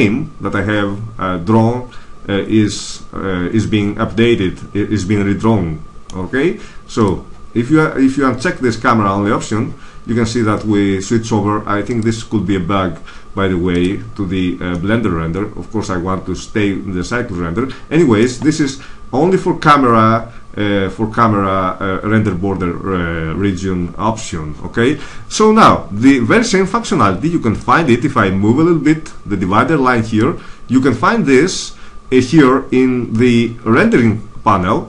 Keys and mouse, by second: 7.0-8.2 drag, 8.2 middle click, 11.8-13.6 drag, 14.6 middle click, 16.6 middle click, 27.5-29.5 middle drag.